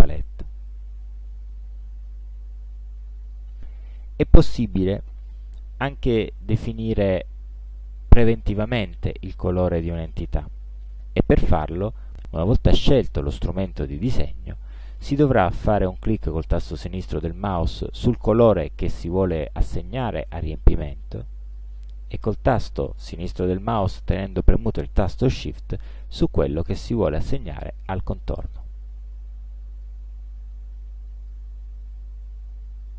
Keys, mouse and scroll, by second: 0.2 ctrl+scroll down 2, 1.0 ctrl+scroll up 2, 1.7 ctrl+scroll down 2, 3.3 click, 6.8 click, 7.5 click, 8.5 ctrl+scroll down 2, 8.9 ctrl+scroll up 2, 12.4 click, 21.5 click, 28.6 shift+click, 29.9-31.6 drag.